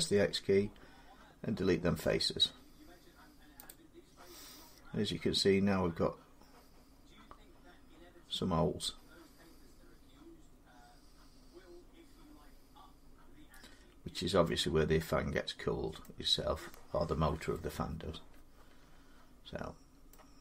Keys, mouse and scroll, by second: 3.5 click, 4.3-8.6 drag, 14.2 middle click, 15.8 middle click, 19.9 middle click.